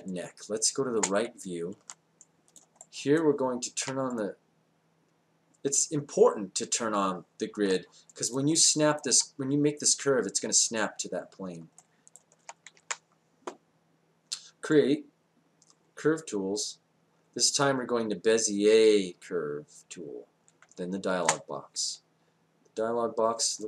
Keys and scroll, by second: 12.7 space.